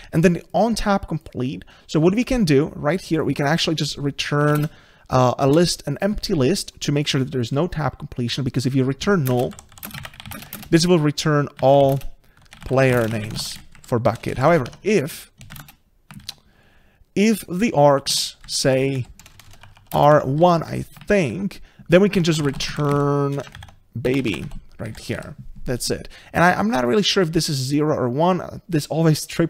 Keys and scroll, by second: 5.5 Return, 14.7 Tab, 18.1 Tab, 21.3 ctrl+shift+Left, 23.9 Return.